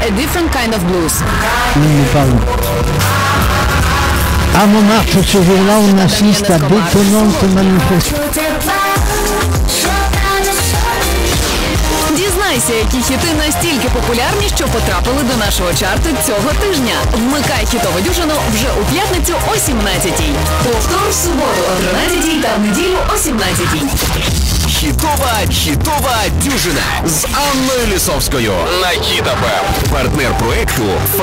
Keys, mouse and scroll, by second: 8.6 Page_Down.